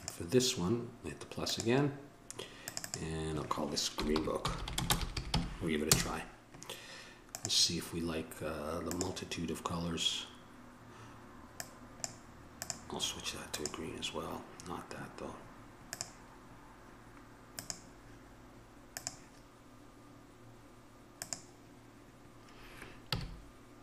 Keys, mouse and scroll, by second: 1.8-5.3 right drag, 4.8 e, 5.3-8.9 middle drag, 8.9-10.6 right drag, 15.9-23.3 middle drag, 23.3 a.